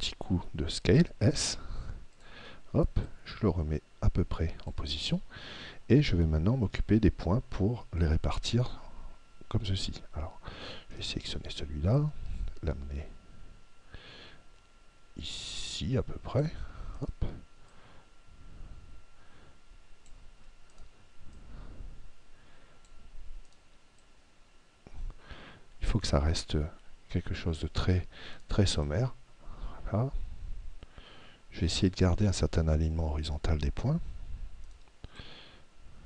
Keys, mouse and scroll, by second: 0.5 s, 2.3-4.9 drag, 11.0 right click, 12.1 click, 17.1 right click, 17.8 click, 20.8 right click, 21.3 click, 23.5 right click, 24.0 click, 28.3 right click, 28.8 click, 34.7 right click, 35.3 click.